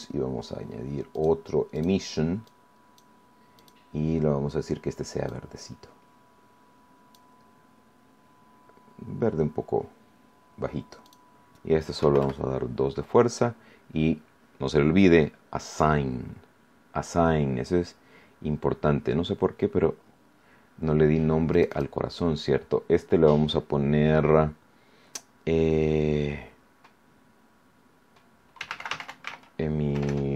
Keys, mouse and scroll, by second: 1.1 click, 1.7 click, 2.4 click, 3.5 click, 5.2-7.3 drag, 7.7-8.3 scroll down 2, 8.4 scroll down 2, 9.3 scroll down 2, 11.0 click, 11.9 KP_2, 12.1 KP_Enter, 15.6 click, 21.5 click, 28.3-30.3 typing.